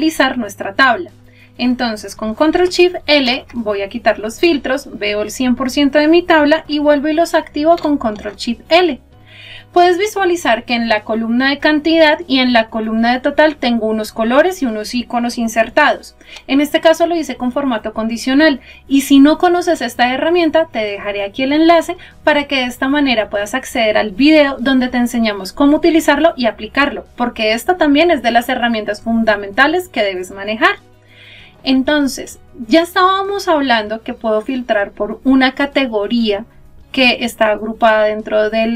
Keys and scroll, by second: 3.2 ctrl+shift+l.